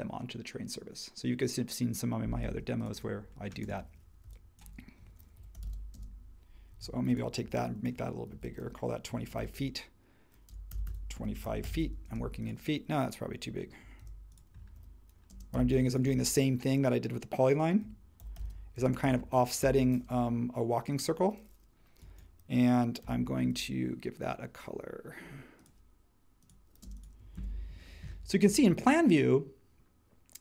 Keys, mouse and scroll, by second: 2.5 space, 4.2-6.2 typing, 6.8 super+z, 7.4-12.2 typing, 13.9-15.5 typing, 14.0 super+z, 17.5-19.6 typing, 23.0 b, 26.8 space, 27.3 super+1.